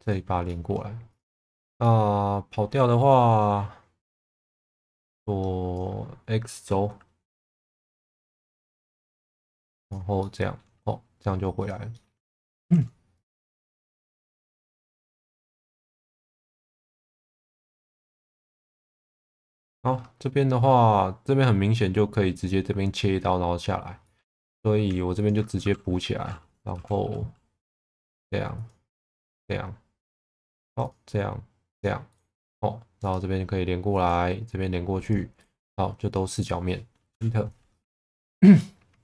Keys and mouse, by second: 0.0 click, 0.5 middle click, 1.1 click, 1.8 middle click, 7.8 g, 7.9 b, 8.5 click, 9.1 x, 9.8 click, 10.2 middle click, 11.9 middle click, 12.7 g, 12.7 b, 13.5 x, 15.0 click, 15.3-16.7 middle drag, 17.0 middle click, 24.2 middle click, 24.4 2, 25.2 alt+click, 25.6 f, 26.7 k, 37.8 1, 38.6 alt+middle click.